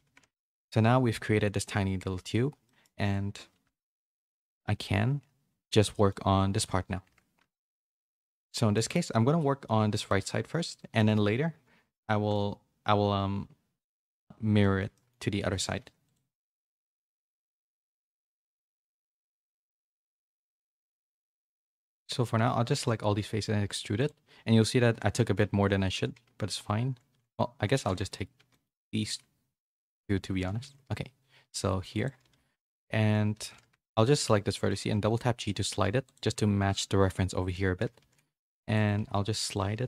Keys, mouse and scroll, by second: 0.1 a, 0.3 shift+middle click, 2.6 middle click, 3.6 KP_3, 4.8 z, 5.4 z, 5.8 middle click, 7.0 Tab, 7.6 KP_1, 8.7 shift+middle click, 10.9 shift+middle click, 12.0 shift+middle click, 14.0 shift+middle click, 14.6 middle click, 16.4 click, 16.7 click, 17.6 KP_1, 18.2 z, 19.2 c, 21.4 c, 23.1 e, 24.5 middle click, 24.9 a, 26.1 ctrl+z, 27.7 c, 28.3 c, 30.6 e, 32.2-34.6 typing, 38.0-39.8 typing.